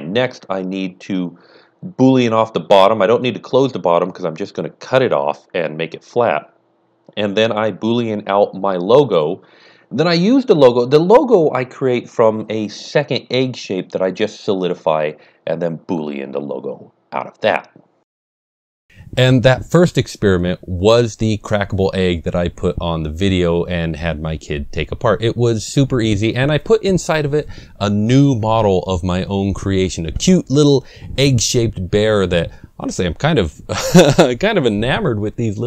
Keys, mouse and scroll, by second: 0.8 click, 1.2 click, 1.6 middle click, 1.6 scroll down 1, 1.8 click, 1.8 scroll up 1, 2.5 click, 2.8 h, 3.0 click, 4.1-5.6 typing, 4.2 click, 4.8 click, 5.4 click, 5.6 Return, 6.9-8.2 middle drag, 7.5 scroll down 1, 7.7 click, 8.2-9.6 middle drag, 8.7 click, 9.3 click, 10.1 click, 10.8 click, 11.0-12.1 typing, 11.2 KP_Enter, 11.3 click, 11.5 middle click, 11.8 scroll up 1, 12.2 click, 12.3 shift+middle click, 12.5 scroll up 1, 12.8 scroll down 1, 12.9 middle click, 13.4 n, 13.6 click, 14.1 click, 14.1 KP_3, 14.4 click, 14.6 KP_8, 14.6 KP_Decimal, 14.8 KP_Enter, 15.0 click, 15.3 click, 15.5 click, 15.9-16.3 typing, 16.1 click, 16.2 middle click, 16.4 click, 16.4-18.9 middle drag, 16.8 scroll down 1, 17.8 scroll up 1, 17.9 scroll down 1, 18.6 click.